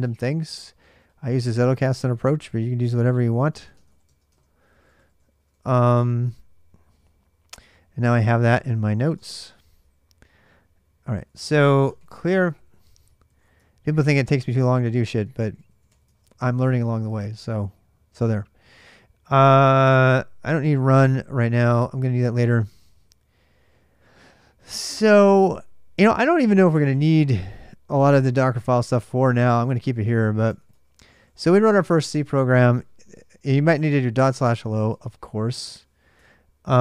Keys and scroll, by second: 1.8 ctrl+[, 1.9-5.0 typing, 7.9-9.3 typing, 10.7-17.2 typing, 26.7-31.9 typing, 33.4-34.7 typing, 34.7 Return, 36.0 alt+Tab.